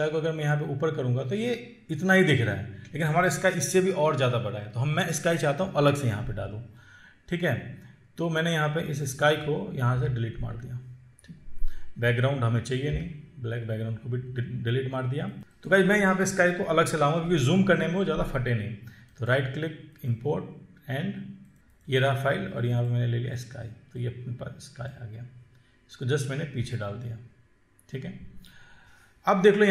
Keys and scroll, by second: 10.3 Delete, 13.2 Delete, 15.4 ctrl+z.